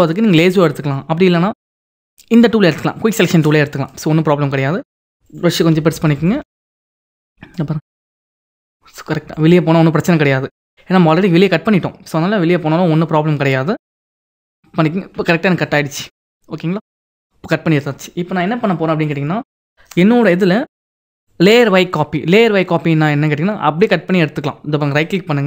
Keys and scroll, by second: 5.7 ].